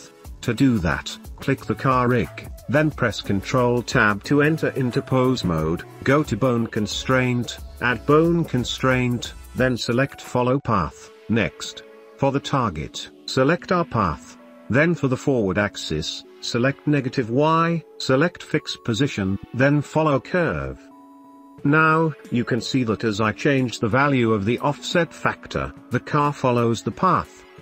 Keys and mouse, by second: 1.6-1.9 shift+middle drag, 3.2 middle click, 5.3 ctrl+Tab, 5.9 ctrl+Tab, 9.1-10.4 drag, 11.8 click, 12.7-15.7 drag, 17.9 click, 19.0 click, 21.1-21.6 shift+middle drag, 21.9 middle click, 23.5 click, 24.4 middle click, 25.3-26.9 drag, 27.2 shift+middle click.